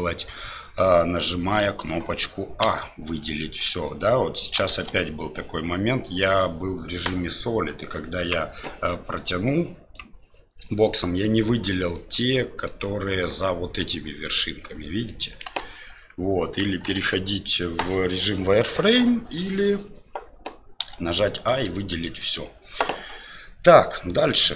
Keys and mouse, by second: 2.6 a, 4.7 alt+a, 7.8 click, 9.6 click, 11.9 middle click, 15.4 KP_1, 16.6 KP_1, 16.9 KP_3, 20.8 a, 21.9 shift+middle click.